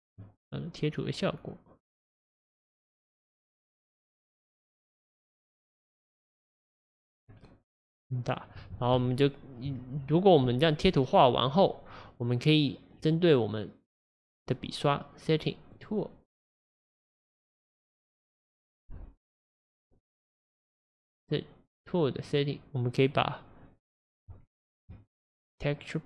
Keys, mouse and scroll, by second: 3.7-6.7 right drag, 7.2-8.9 scroll up 8, 8.9 Tab, 10.9-11.3 scroll down 3, 15.7 click, 18.5 click, 19.2-20.2 scroll down 7, 20.2 click, 22.1 click, 24.9 Tab.